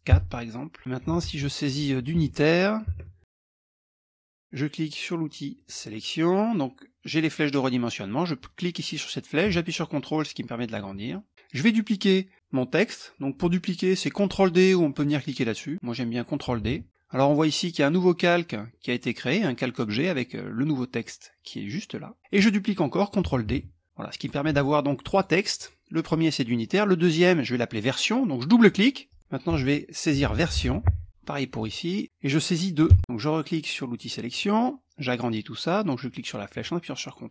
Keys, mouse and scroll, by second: 0.8 f, 1.7 ctrl+a, 2.5 shift+Caps_Lock, 3.4 e, 5.1 click, 7.9-10.4 drag, 10.6 click, 16.2 ctrl+d, 20.5-22.2 drag, 23.0 ctrl+d, 23.4 click, 24.7-25.7 drag, 28.2 click, 29.2-30.8 typing, 31.1 click, 32.5 KP_2, 33.9 click, 35.5-37.1 drag.